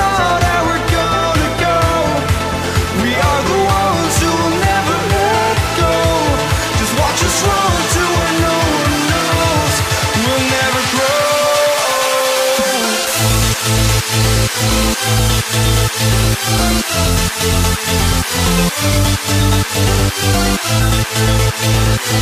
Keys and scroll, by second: 1.0 ctrl+z, 2.3 ctrl+z, 9.9 ctrl+t, 13.0 ctrl+t, 14.1 ctrl+t, 15.0 ctrl+v, 15.1 ctrl+t, 20.9 ctrl+z.